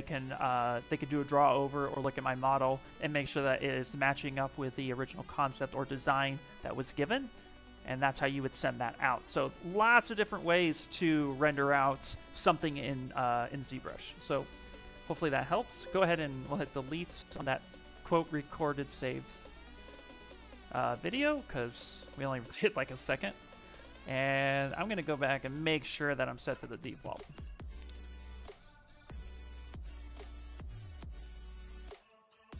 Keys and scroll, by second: 23.0 ,, 26.2 ,.